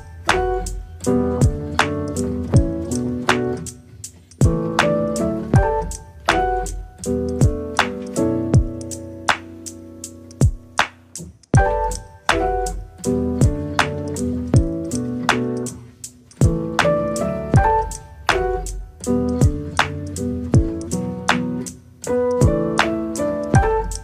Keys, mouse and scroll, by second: 0.9 click, 1.7 click, 2.3 KP_0, 2.6 middle click, 3.3-3.9 scroll up 1, 3.9 shift+middle click, 4.4 click, 5.2 middle click, 5.9 click, 7.0 middle click, 7.5 click, 8.1-9.2 middle drag, 9.2 r, 10.5 click, 11.3 r, 12.3 click, 13.8 KP_0, 15.1 r, 18.0-18.4 scroll up 1, 18.4-19.6 shift+middle drag, 20.9 click, 21.5 click, 23.5-23.8 scroll down 4, 23.8 click.